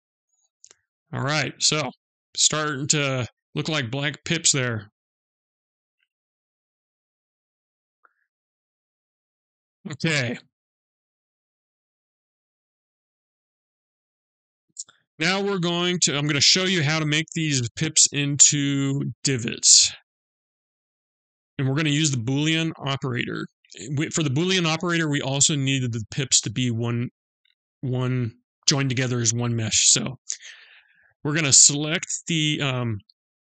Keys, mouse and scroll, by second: 0.9 click, 1.8-2.6 scroll up 2, 2.9 middle click, 2.9 scroll up 1, 6.4-6.8 scroll down 4, 7.0 middle click, 15.7 middle click, 19.4 middle click, 31.8 click.